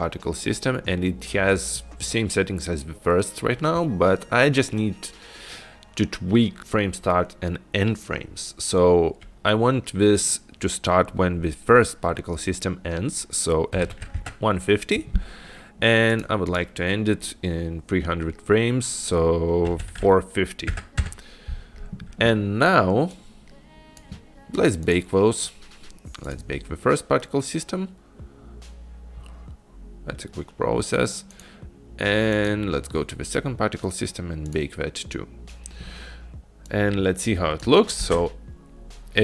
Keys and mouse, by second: 6.6-16.3 drag, 16.6-21.6 drag, 23.4-24.4 drag, 26.3 click, 26.4-31.5 drag, 32.5 click, 34.6 click, 34.7 click, 37.0 click, 38.2 space.